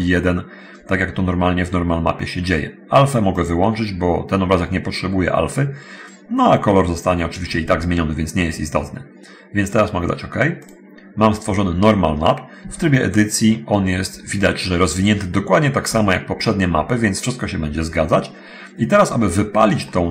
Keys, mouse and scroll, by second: 3.5 click, 10.8 click, 11.2-11.6 scroll down 1, 12.8 Tab, 15.8 Tab, 18.8-19.4 scroll down 1, 19.5 scroll down 1, 20.0-20.1 middle drag.